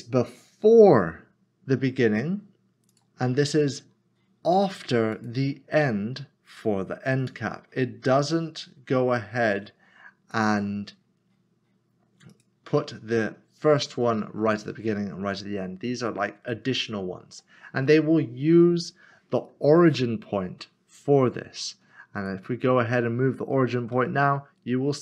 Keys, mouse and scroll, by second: 2.9 click, 5.2 click, 10.3 click, 16.5 click, 16.8 middle click, 17.8 scroll down 1, 19.9 middle click, 22.2 click, 23.9 typing.